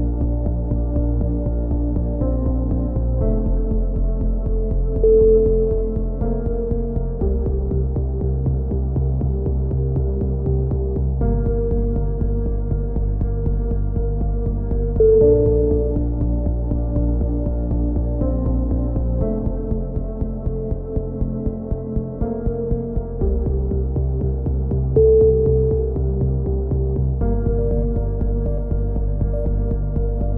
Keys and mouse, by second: 0.0 click, 2.7-3.7 drag, 4.9 right click, 5.5 middle click, 5.7 right click, 8.2-10.4 right drag, 11.0 z, 11.3 right click, 12.1 middle click, 13.9-14.9 middle drag, 14.8-16.6 right drag, 16.2 click, 20.8 right click, 22.7 click, 23.2 ctrl+z, 23.8-25.5 drag, 24.2 z, 25.1 z, 25.5 right click, 26.0 z, 26.3 z, 27.2 right click, 29.7 right click, 30.3 click.